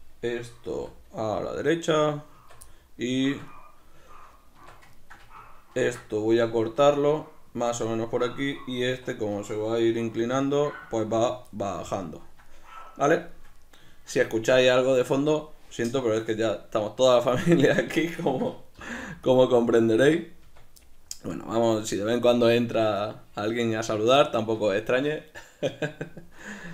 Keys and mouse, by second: 0.0 right click, 0.7 g, 2.1 click, 2.3 Tab, 2.7-7.6 middle drag, 4.6 Tab, 5.8 ctrl+r, 7.6 click, 8.9 1, 9.1-10.1 right drag, 10.1 g, 11.3 click, 11.5-17.7 shift+middle drag, 17.7 right click, 18.2-19.3 ctrl+middle drag, 18.8 g, 19.3 click, 19.7-26.7 shift+middle drag, 20.5 Tab.